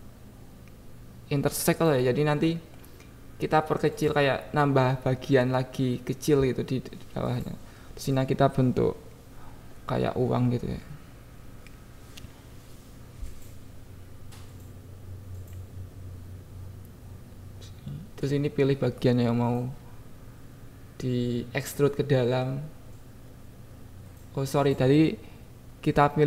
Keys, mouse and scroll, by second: 0.7 click, 1.3 click, 2.1 shift+click, 3.0 ctrl+z, 3.7 shift+click, 5.8 click, 7.2 shift+click, 8.1 ctrl+b, 9.3 click, 10.3 click, 10.6 click, 10.9 Tab, 11.2 Tab, 12.0 click, 13.4 click, 13.7 Tab, 14.0 Tab, 14.7 click, 15.2 click, 16.8 c, 19.1 click, 20.0 c, 21.2 click, 21.6 c, 23.4 click, 24.2 c.